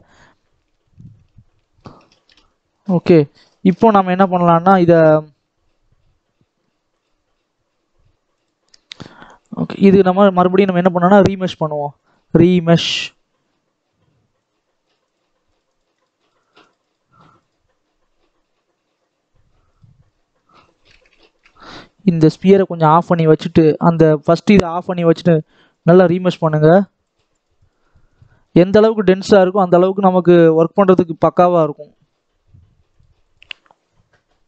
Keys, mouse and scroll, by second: 0.2 scroll up 2, 0.4 scroll down 1, 0.7 middle click, 1.1 Tab, 1.5 shift+middle click, 2.3 scroll up 1, 2.5 scroll down 2, 3.6 KP_7, 4.4-4.7 scroll up 2, 4.7-5.2 scroll down 2, 12.1-14.4 drag, 14.9-18.9 drag, 18.9-19.6 scroll up 1, 19.6 click, 19.9-20.5 scroll up 5, 20.5-21.1 scroll down 2, 21.1-22.1 shift+middle drag, 22.1 click, 22.5-24.5 scroll down 2, 24.5-29.6 drag, 29.7-30.4 scroll up 7, 30.4-31.2 scroll up 6, 31.2 shift+middle click, 31.6 scroll up 3.